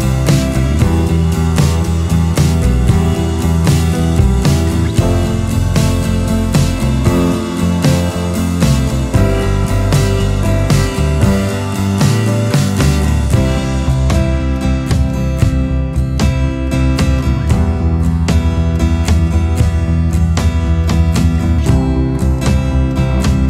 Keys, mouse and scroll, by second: 5.8-6.2 scroll, 10.6 ctrl+z, 12.0 ctrl+z, 18.2 ctrl+alt+space, 19.2 alt+space.